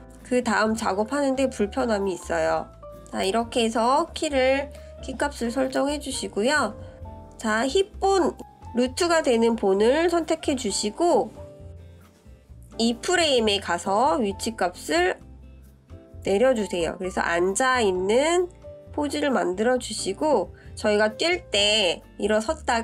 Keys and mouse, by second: 9.3 click, 14.5 click, 16.5 click, 18.0-20.4 drag, 21.1 click, 22.1-22.8 drag.